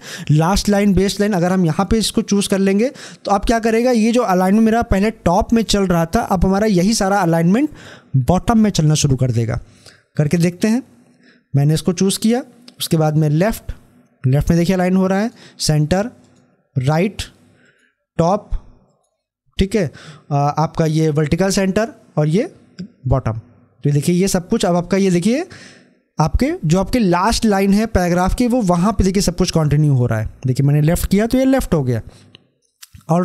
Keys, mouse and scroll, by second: 1.4 click, 2.6 scroll down 1, 12.9 click, 22.0 click, 29.6 scroll up 1.